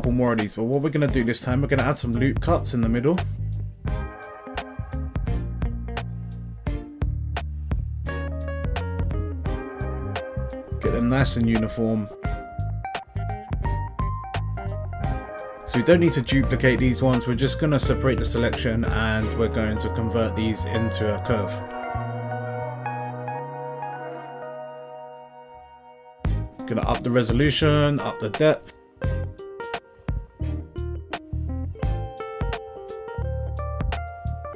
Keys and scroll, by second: 13.3 alt+s, 22.7 Tab.